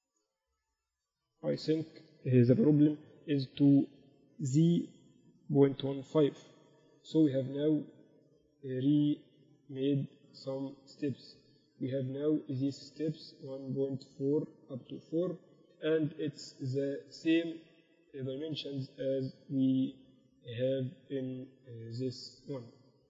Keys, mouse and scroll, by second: 0.4-2.4 right drag, 1.5 g, 3.2 e, 4.8 click, 13.8-15.2 right drag, 15.2 Tab, 19.2-21.8 middle drag.